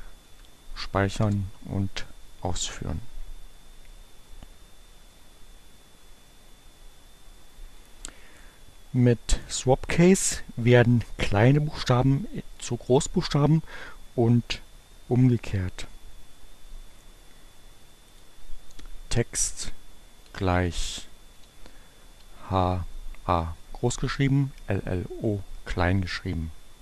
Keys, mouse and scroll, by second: 0.3 Up, 0.7 Return, 18.2 click, 19.2 Delete, 20.9 shift+h, 22.0 a.